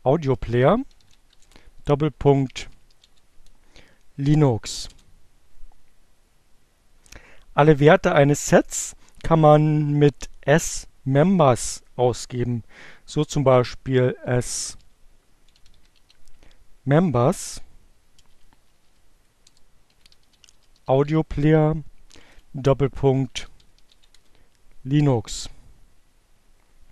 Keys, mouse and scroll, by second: 0.0-2.9 typing, 3.1 Return, 13.1-16.0 typing, 17.9-23.9 typing.